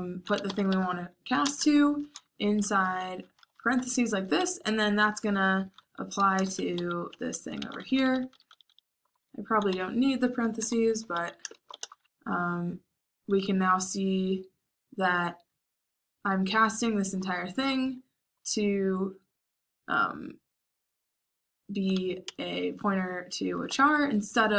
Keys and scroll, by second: 0.0-1.7 typing, 2.7 Escape, 3.3-11.7 typing, 13.3-14.1 typing, 16.6-18.4 typing, 22.2-24.4 typing.